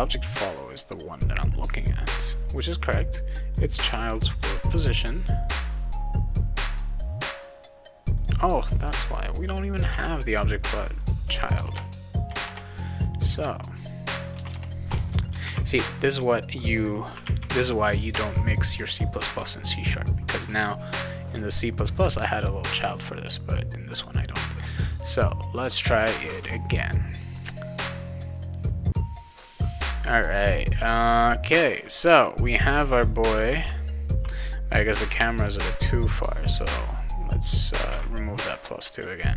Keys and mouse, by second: 3.5 click, 3.7 click, 4.1 click, 4.3 click, 5.5 click, 8.1 click, 9.9 alt+Tab, 11.0 click, 11.6 BackSpace, 12.4 BackSpace, 14.2 click, 14.3 BackSpace, 15.4 ctrl+s, 17.2 alt+Tab, 24.7 click, 29.9 click, 32.0 a, 32.7 w, 33.6 s, 36.5 click, 37.9 alt+Tab.